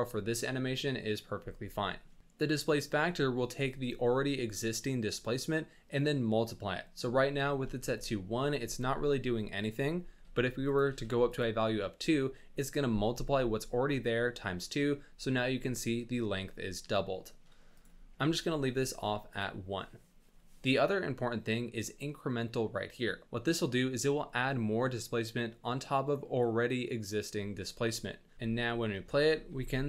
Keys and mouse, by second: 10.6 click, 17.7-19.3 drag, 28.1 space, 29.2 shift+drag.